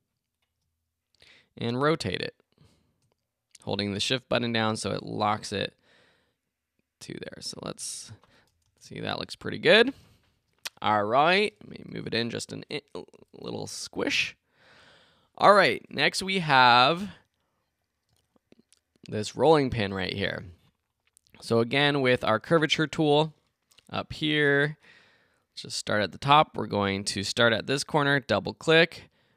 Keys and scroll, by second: 8.6 alt+Return, 11.7 Left.